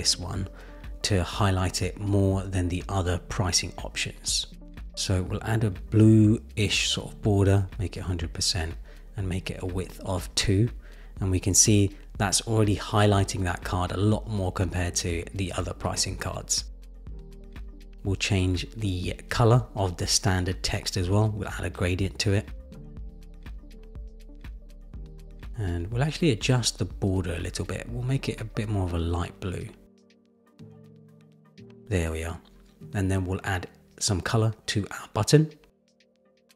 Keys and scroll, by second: 5.6 Return, 22.1 super+v, 22.6 Return, 23.8 Return.